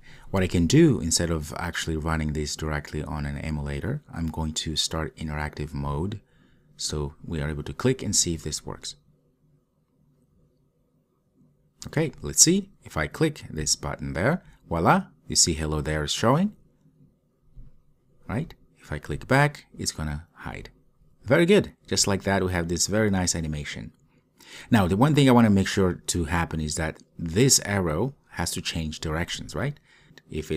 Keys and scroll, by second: 17.7 super+/.